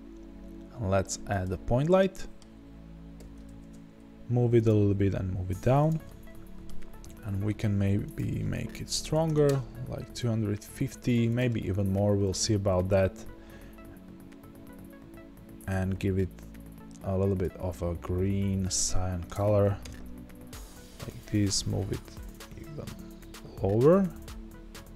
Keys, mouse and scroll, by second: 1.4-3.5 middle drag, 1.4 shift+a, 3.2 g, 3.7 middle click, 4.6 click, 4.7 g, 5.8 click, 6.0 middle click, 6.7-9.4 scroll down 2, 9.4-12.2 drag, 9.5 KP_Enter, 17.8-18.6 scroll down 2, 18.6-20.8 middle drag, 19.8 KP_0, 20.8 g.